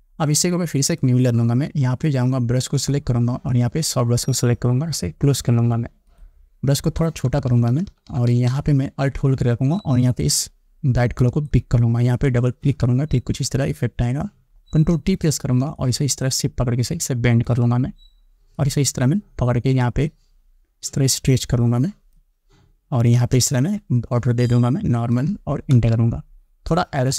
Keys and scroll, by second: 7.5 [, 14.8 ctrl+t, 26.0 Return.